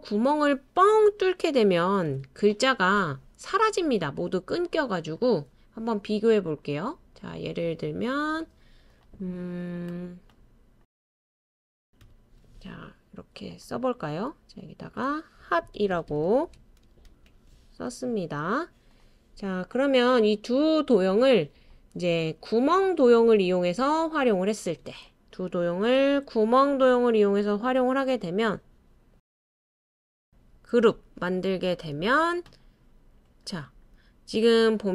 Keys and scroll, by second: 1.8 super+c, 2.1 super+v, 10.1-12.0 typing, 14.2-16.6 typing.